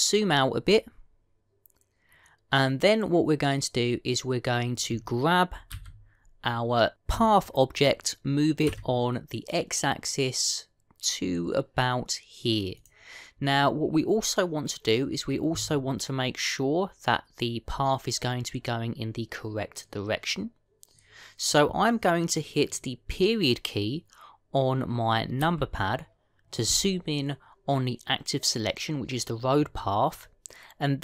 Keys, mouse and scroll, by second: 1.5-4.5 scroll down 2, 6.6 g, 26.3 KP_Decimal.